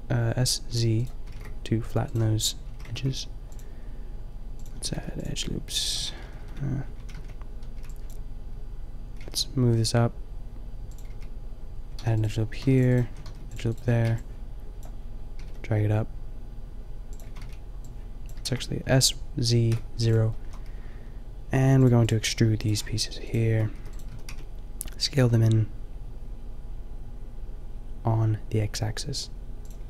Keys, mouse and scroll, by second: 0.6 g, 1.2 s, 2.6 a, 2.9 ctrl+r, 4.6-5.9 drag, 4.7 a, 5.0 ctrl+r, 6.1 ctrl+z, 6.2 ctrl+z, 6.5 ctrl+z, 7.0 a, 7.2 a, 7.8 b, 9.2 g, 10.9 click, 11.1 a, 11.9 ctrl+r, 12.6 ctrl+r, 13.1 a, 13.3 ctrl+r, 13.7 a, 14.0 b, 15.3 g, 17.1 click, 17.2 a, 17.4 b, 18.3 s, 20.4 a, 23.8 e, 24.1 s.